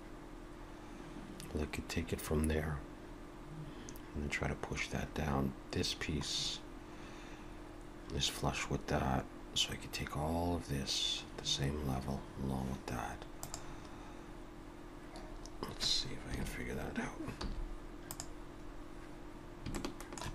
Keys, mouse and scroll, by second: 16.3 KP_3, 17.4 z, 18.7 scroll up 2, 19.8 shift+middle click.